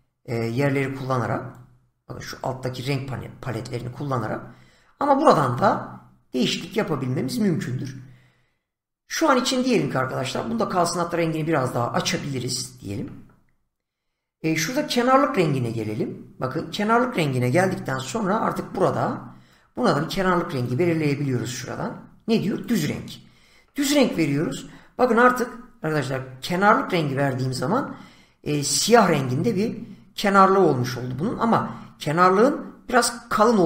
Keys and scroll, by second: 17.6 <.